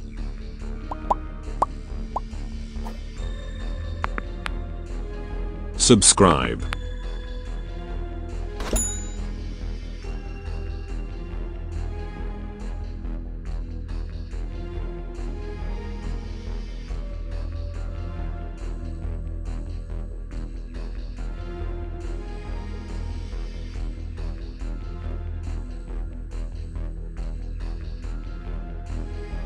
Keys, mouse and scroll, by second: 1.3 scroll down 1, 2.0-6.3 shift+middle drag, 13.1-13.8 scroll down 2, 15.1 middle click, 15.5 scroll down 1, 16.5-29.4 shift+middle drag.